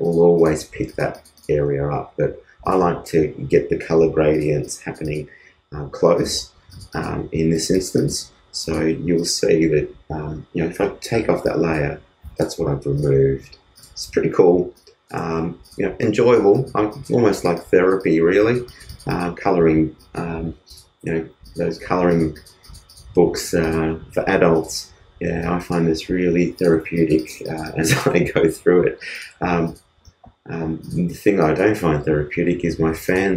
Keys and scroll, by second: 15.4 alt+space.